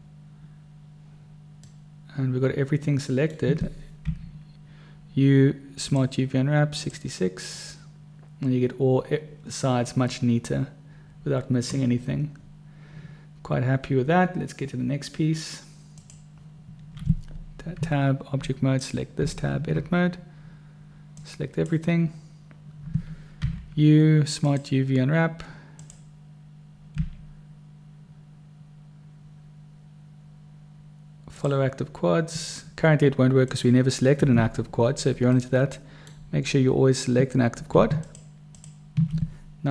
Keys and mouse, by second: 2.0-3.7 drag, 2.0-3.7 right drag, 4.4 u, 16.3 click, 18.1 Tab, 19.5 Tab, 21.5 click, 23.8 u, 27.4 u, 35.7 middle click, 36.0 click, 36.0 right click, 38.3 shift+click.